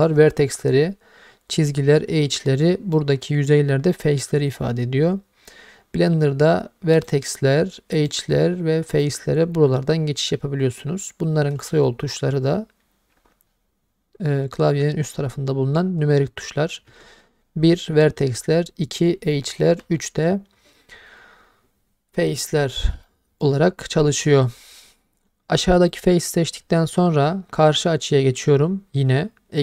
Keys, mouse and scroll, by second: 7.0 click, 7.9 click, 8.9 click, 23.1 middle click, 23.6-25.9 scroll up 1, 25.9 click.